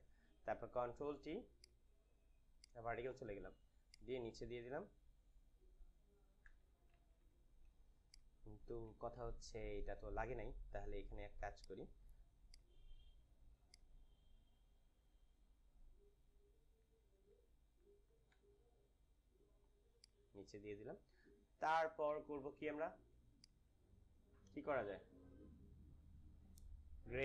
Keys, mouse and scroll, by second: 0.8 t, 1.6 right click, 2.5 right click, 4.1-6.4 drag, 6.4 Return, 6.9 ctrl+=, 7.7 space, 8.1 click, 8.3 space, 9.1 ctrl+=, 10.8 ctrl+t, 11.5 right click, 12.4-16.8 drag, 16.8 Right, 18.2 Down, 18.2 Return, 19.9-22.9 drag, 23.3 click, 24.3 Up.